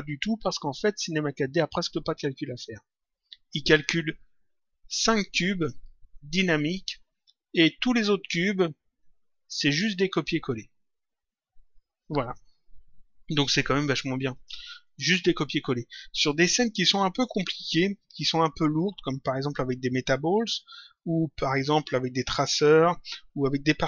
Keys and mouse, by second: 14.3 click.